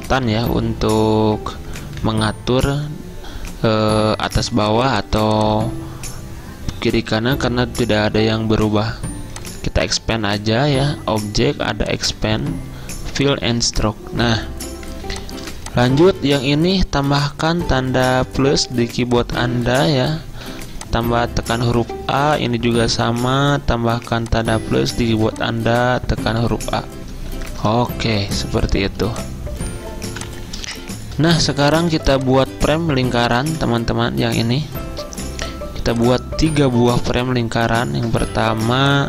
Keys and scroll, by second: 2.1 Up, 2.1-3.3 typing, 6.2 Up, 6.2 Down, 15.0 z, 17.1 =, 20.5 a, 23.0 =, 25.3 a, 27.4-28.6 typing, 30.2 typing, 31.6-32.6 typing.